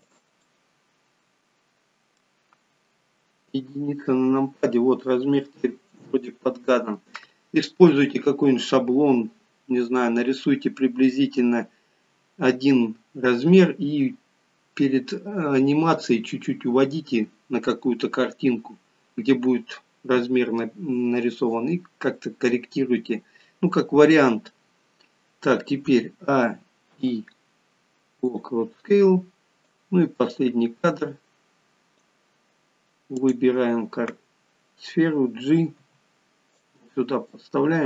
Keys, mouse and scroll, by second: 0.4 middle click, 0.4 scroll up 1, 3.5 KP_1, 26.3-27.2 a, 27.2 i, 30.1 click, 33.2 click, 35.8 g.